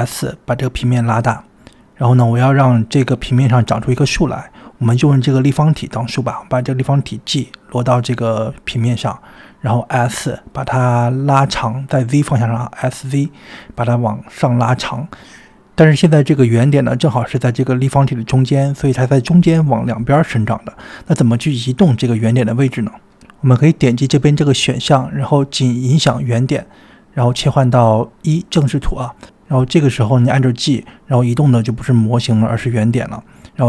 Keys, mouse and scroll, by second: 0.2 s, 1.5-2.9 middle drag, 3.4-3.9 scroll up 2, 6.1 click, 7.0 g, 10.3 g, 11.0 g, 11.6 s, 13.0 s, 22.1 g, 24.8-26.1 drag, 27.1 KP_1, 29.2-30.0 drag, 31.1 click, 31.7 g.